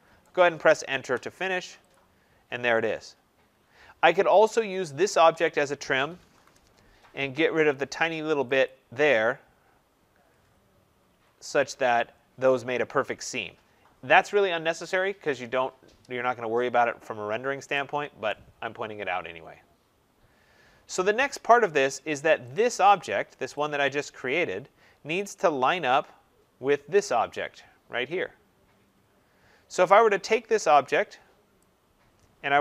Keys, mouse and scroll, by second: 0.1 right click, 0.8 Return, 1.8 click, 2.3 scroll, 3.4-3.7 scroll, 4.5 click, 5.5-6.7 typing, 8.6 click, 9.4-11.6 typing, 10.8 Escape, 11.6 middle click, 11.6 middle click, 16.6 middle click, 16.7 middle click, 16.8 middle click, 18.2 right click, 18.6 middle click, 18.6 middle click, 18.7 middle click, 18.8 middle click, 19.4 middle click, 19.5-20.2 middle click, 20.1 middle click, 20.2 middle click, 20.4 middle click, 20.9 middle click, 21.1 middle click, 21.2 middle click, 21.3 middle click, 21.4 middle click, 22.4 click, 22.8 middle click, 22.8 middle click, 22.9 middle click, 23.4 click, 23.7 middle click, 23.8 middle click, 23.8 middle click, 25.2 middle click, 25.4 middle click, 25.5 middle click, 25.7 middle click, 28.7 middle click, 28.7 middle click, 28.8 middle click, 28.9 middle click, 31.5 click.